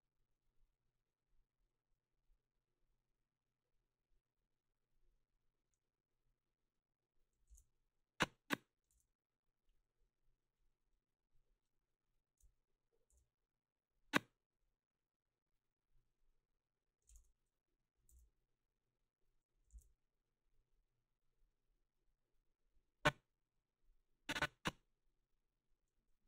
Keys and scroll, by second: 7.5 ctrl+c, 13.1 ctrl+c, 19.8 ctrl+z.